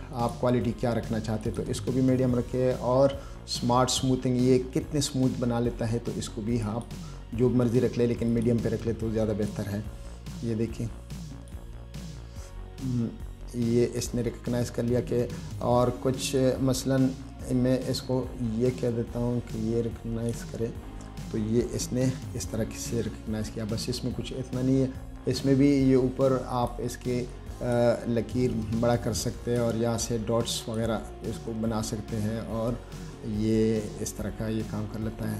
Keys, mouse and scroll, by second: 0.4 click, 1.7 click, 6.9 click, 8.6 click, 9.8-11.8 drag, 16.6-20.6 drag, 26.8 click, 27.6 click, 29.7 click, 30.9 click, 34.3-34.6 scroll down 1, 34.7-35.0 scroll up 1.